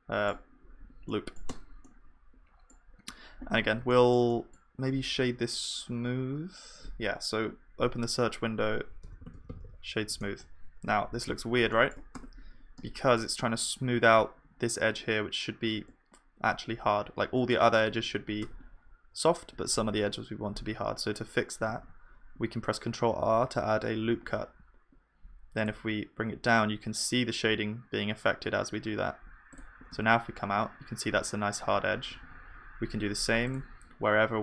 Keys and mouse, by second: 1.5 Tab, 7.6 F3, 11.7-16.0 middle drag, 12.1 Tab, 21.7 ctrl+r, 30.0 Tab, 31.6 Tab, 32.2 ctrl+r.